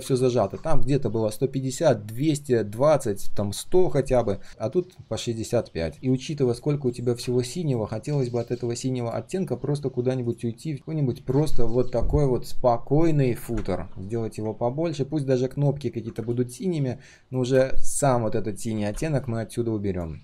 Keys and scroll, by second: 0.0 ctrl+z.